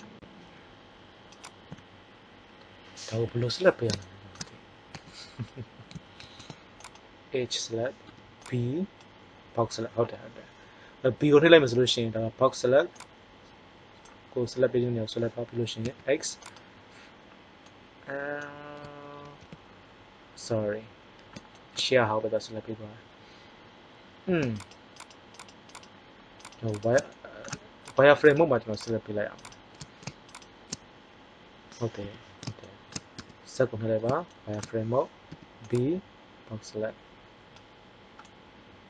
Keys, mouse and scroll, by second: 3.2 KP_1, 5.0 a, 6.2 ctrl+Tab, 8.0 b, 11.6 b, 15.9 x, 17.7-18.7 middle drag, 19.2 ctrl+z, 32.0 KP_1, 33.1 z, 35.3 b.